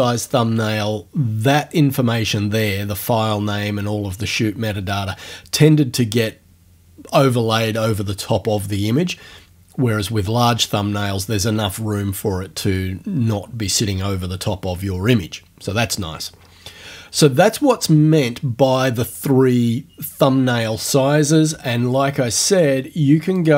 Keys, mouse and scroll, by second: 21.9-22.2 ctrl+scroll down 2, 23.4 click.